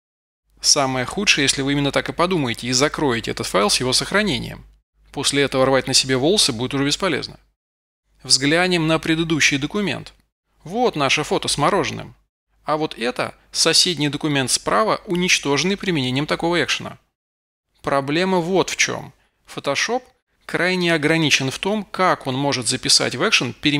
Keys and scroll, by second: 23.4 super+v.